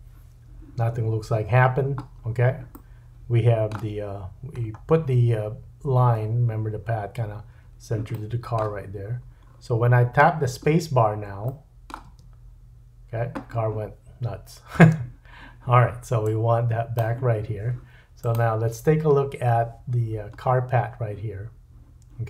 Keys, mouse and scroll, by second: 1.5-2.8 scroll down 8, 2.8-16.3 middle drag, 4.0-5.7 scroll up 5, 9.1-9.5 scroll up 4, 9.5-11.4 scroll down 10, 12.1 space, 14.8 space, 16.3-18.3 drag, 18.3-19.9 middle drag, 19.9-21.2 scroll up 4.